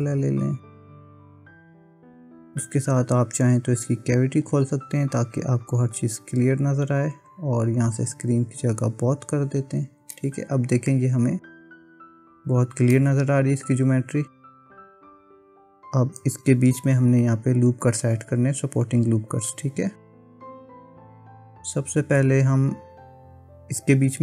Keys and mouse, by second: 10.1 middle click, 13.0-15.6 middle drag, 16.7 KP_1.